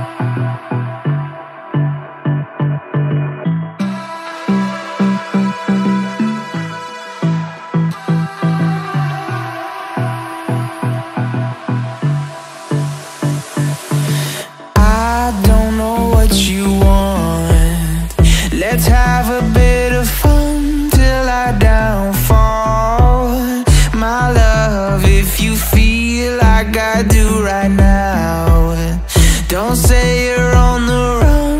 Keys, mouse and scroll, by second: 1.0 space, 2.3 ctrl+z, 2.4 right click, 4.0-4.7 typing, 4.8 Return, 5.7 ctrl+t, 8.7 ctrl+z, 8.8 ctrl+z, 9.0 ctrl+z, 9.1 ctrl+z, 9.5 ctrl+z, 9.8 Delete, 10.9 typing, 11.2 Return, 12.6 ctrl+t, 15.0 ctrl+t, 16.0 ctrl+t, 16.8 ctrl+t, 17.7 alt+scroll down 1, 18.0 alt+scroll up 1, 18.2-18.7 alt+scroll down 2, 18.3 space, 18.8 ctrl+click, 19.0 scroll up 1, 19.2 shift+click, 19.6 ctrl+g, 20.2 scroll down 1, 20.4 shift+click, 20.9 ctrl+click, 21.2 ctrl+scroll up 1, 21.4 ctrl+click, 21.7 ctrl+g, 22.4 double click, 23.6 alt+scroll up 1, 23.8 space, 24.4 double click, 25.9 alt+scroll down 1, 27.3 alt+scroll up 1, 27.5 ctrl+t, 29.5 alt+scroll down 1, 29.6-29.9 alt+scroll up 2.